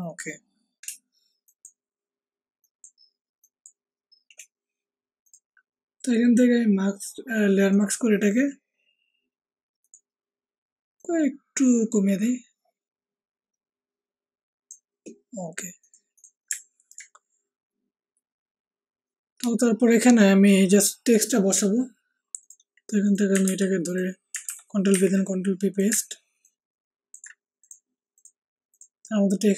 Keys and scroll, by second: 23.4 ctrl+c, 24.4 ctrl+v, 24.8 ctrl+t.